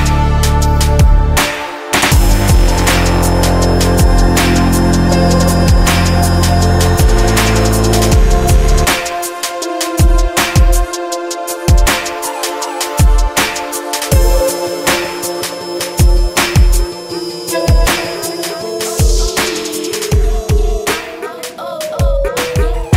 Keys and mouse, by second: 1.4 middle click, 11.2-13.3 drag, 22.2-22.9 middle drag.